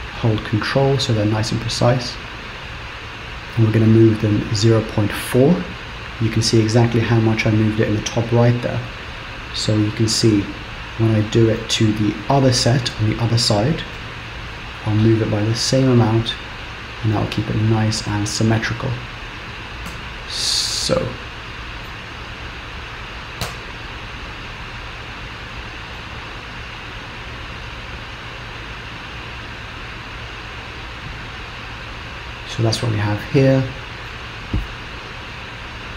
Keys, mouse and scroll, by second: 10.1 click, 14.4 g, 20.0 Tab, 20.4 middle click, 22.2 scroll down 2, 23.6 z, 26.1 middle click.